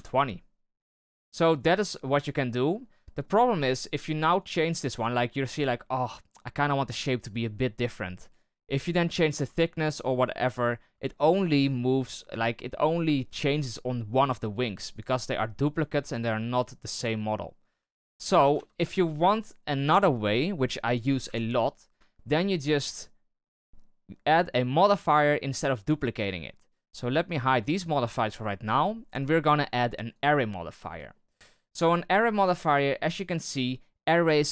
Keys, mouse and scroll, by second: 0.9 right click, 1.4-3.7 middle drag, 3.7-4.3 scroll up 1, 4.3 right click, 5.3-9.0 middle drag, 9.0-10.4 drag, 10.4 middle drag, 10.6-11.0 scroll down 1, 11.0-14.0 shift+middle drag, 14.0 right click, 14.9-15.8 right drag, 17.6 right click, 18.1 shift+right click, 18.5 x, 19.4 right click, 21.2 KP_7, 22.1-22.5 shift+middle drag, 22.5-23.6 scroll up 4, 26.3-27.0 scroll up 1, 27.0-30.8 drag, 30.8 scroll down 4, 31.1-31.8 middle drag, 31.8-32.1 scroll up 1, 32.1-34.5 middle drag.